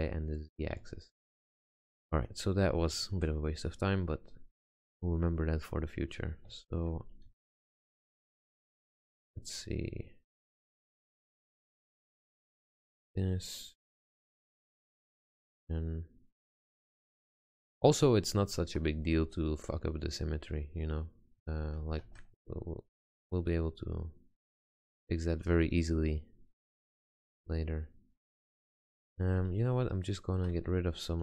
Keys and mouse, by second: 0.4-3.2 middle drag, 4.4 middle click, 5.1 middle click, 7.4 a, 8.0 a, 9.0 g, 12.3 r, 14.0 click, 14.2 g, 14.5 click, 16.9 click, 18.7 Tab, 22.1 ctrl+z, 22.6 click, 25.2 click, 28.7 click, 29.6 Tab.